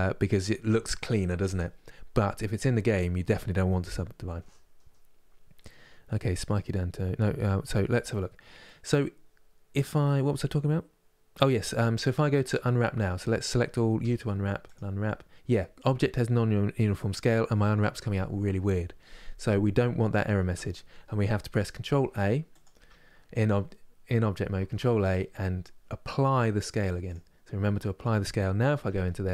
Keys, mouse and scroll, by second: 12.0 Tab, 12.6 Tab, 12.9 a, 14.4 u, 21.6 ctrl+a, 22.4 Tab, 26.8 ctrl+a, 27.5 middle click, 28.4 Tab, 28.7 middle click.